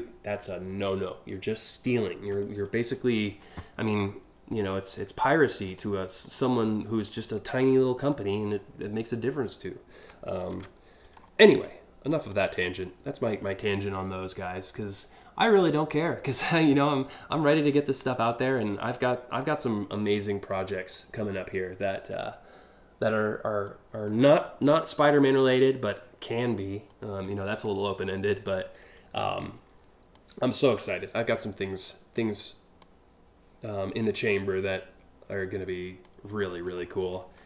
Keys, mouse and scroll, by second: 5.3 click, 5.8 right click, 6.7 click, 7.6 click, 10.1 ctrl+t, 10.8 scroll down 1, 12.0 click, 16.9 click, 17.9-19.0 drag, 20.5-23.2 drag, 23.7 scroll down 1, 24.2 scroll down 1, 25.3-26.5 drag, 27.2 click, 29.0 click, 30.2-31.7 drag, 32.4-35.6 drag, 36.1-36.8 scroll up 3.